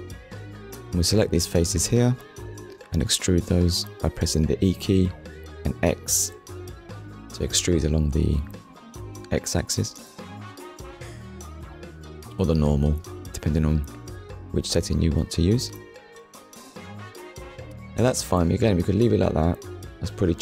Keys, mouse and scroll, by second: 0.5 click, 1.6 click, 3.1 shift+click, 4.1 middle click, 14.2 click, 15.5 Tab, 15.8 middle click, 19.7 click.